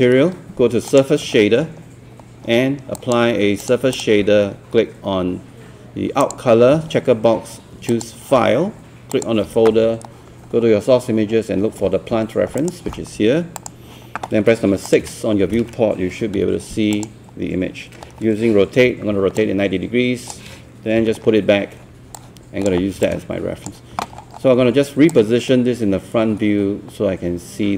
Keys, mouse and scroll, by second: 0.9-10.2 drag, 11.3-12.2 scroll down 1, 12.6 click, 15.1 click, 16.4 e, 17.0 click, 18.8-21.7 typing, 19.4 click, 22.2-24.1 drag, 24.2 scroll down 1, 25.1-27.7 drag.